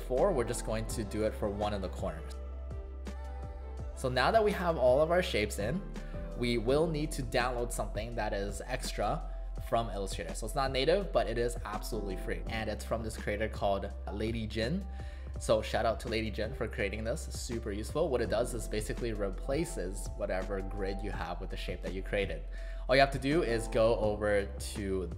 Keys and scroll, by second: 0.7 space, 1.8 a, 3.2 ctrl+z, 3.8 v, 4.2 space, 5.1 space.